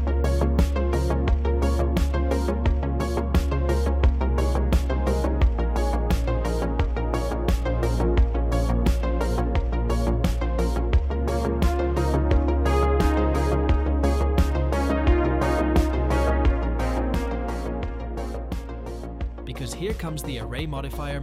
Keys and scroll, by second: 1.6 c, 9.3 c, 12.3 x, 17.1 Tab.